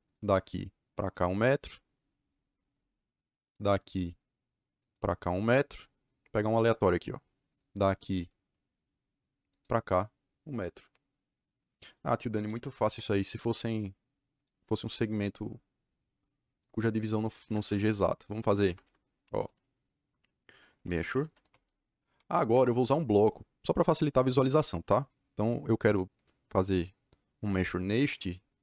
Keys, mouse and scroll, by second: 0.0 click, 1.0 click, 2.6 Return, 3.4 click, 4.7 click, 6.3 Return, 7.4 click, 9.4 click, 12.4 c, 12.8 Return, 14.3 click, 14.7 right click, 15.0 click, 16.4 click, 17.4 Escape, 17.5 Escape, 18.5 Escape, 18.8 Escape, 20.4-22.1 typing, 22.4 Return, 26.5 click.